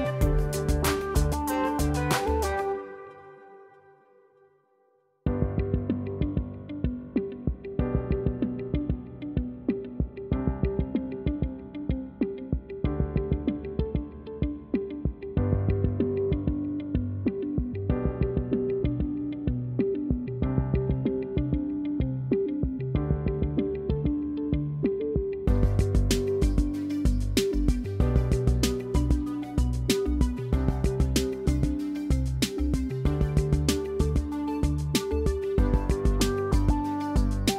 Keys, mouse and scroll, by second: 2.0 click, 2.7 F2, 3.6 F1, 4.6 click, 5.1-7.9 typing, 8.5 scroll, 8.6-9.1 scroll up 4, 10.6 click, 10.6 scroll, 13.8 F1, 16.1 click, 16.5 click, 19.4 click, 21.4 click, 22.2 =, 23.1 =, 25.9 click, 29.2 F2, 29.2 click, 31.7 click, 33.5 click, 35.4 click, 36.3 click.